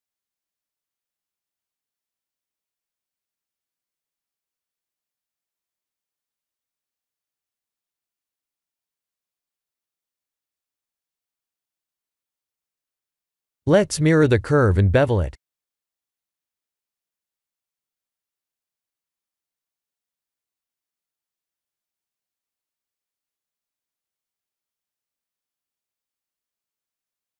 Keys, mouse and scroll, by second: 0.3 click, 1.2 click, 1.9 a, 3.0 click, 3.8 g, 7.1 Tab, 9.4 Tab, 10.3 Tab, 12.4 click, 13.6 click, 14.2 click, 17.7 click, 20.3 click, 20.7-22.3 scroll down 12, 22.7 click.